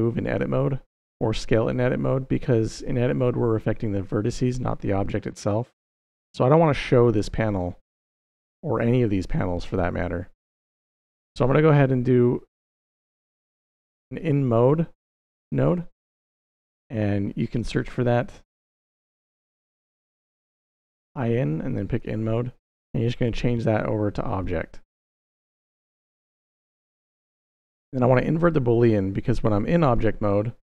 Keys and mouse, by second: 4.4 middle click, 5.2 middle click, 11.6 middle click, 12.3 middle click, 13.4 middle click, 14.0 click, 15.5 click, 16.1 shift+a, 23.0-25.2 drag, 25.9 x, 26.6 middle click, 27.9 click.